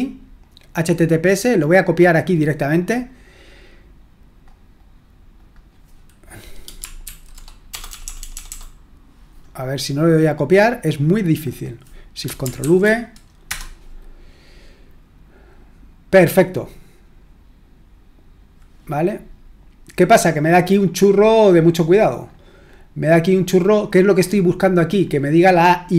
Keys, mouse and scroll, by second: 2.1-4.4 drag, 5.4 click, 7.0 ctrl+v, 7.7-8.4 typing, 10.3 right click, 11.0 click, 12.6 ctrl+v, 13.5 Return, 20.7-24.3 scroll up 3, 24.3-25.9 scroll up 1.